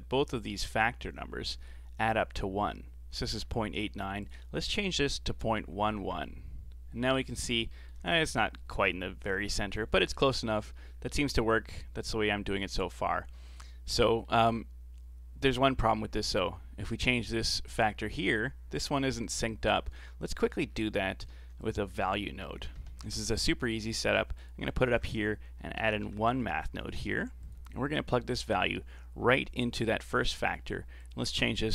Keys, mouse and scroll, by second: 4.2-5.7 drag, 5.7 KP_1, 7.1-7.4 scroll up 5, 7.7-8.1 shift+middle drag, 8.1-9.6 scroll up 1, 9.6-11.0 scroll down 5, 11.0-12.5 scroll down 9, 13.4-15.7 middle drag, 15.7-18.7 drag, 19.9 ctrl+z, 20.3 middle click, 20.7-21.1 scroll down 4, 21.1 middle click, 21.3 shift+a, 24.9 shift+a, 28.4 click, 31.0-31.7 drag.